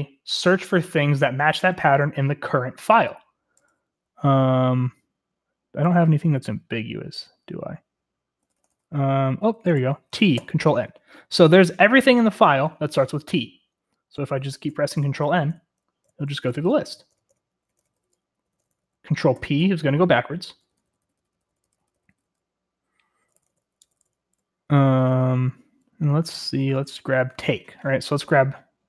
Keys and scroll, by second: 8.4-9.7 typing, 10.3 ctrl+n, 14.7 ctrl+n, 14.9 ctrl+n, 15.2 ctrl+n, 15.5 ctrl+n, 16.0 ctrl+n, 16.5 ctrl+n, 16.7 ctrl+n, 17.1 ctrl+n, 17.3 ctrl+n, 17.9 ctrl+n, 18.4 ctrl+n, 18.7 ctrl+n, 18.8 ctrl+n, 19.3 ctrl+p, 19.6 ctrl+p, 19.7 ctrl+p, 19.9 ctrl+p, 20.1 ctrl+p, 20.5 ctrl+p, 20.7 ctrl+p, 21.0 ctrl+p, 21.1 ctrl+p, 21.8 ctrl+p, 22.1 ctrl+p, 22.2 ctrl+p, 23.2 ctrl+n, 23.3 ctrl+n, 23.4 ctrl+n, 23.8 ctrl+n, 23.9 ctrl+n, 24.7 ctrl+p, 25.1 ctrl+p, 26.7 ctrl+p, 26.9 ctrl+p, 27.0 ctrl+p.